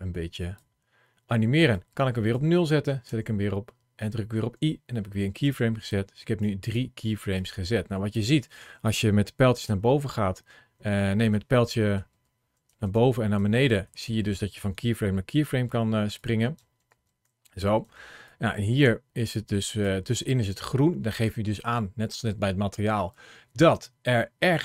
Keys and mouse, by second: 1.5 click, 2.9 i, 5.8 click, 6.4 click, 7.2 click, 9.5 Up, 9.9 Up, 10.4 Down, 11.0 Left, 11.4 Left, 11.8 Up, 12.2 Up, 12.5 Up, 12.8 Up, 13.2 Down, 13.4 Down, 13.9 Down, 14.1 Down, 14.4 Up, 14.8 Up, 15.3 Down, 16.0 click, 16.4 Up, 16.7 Up, 17.3 Up, 17.7 Down, 18.1-19.7 drag.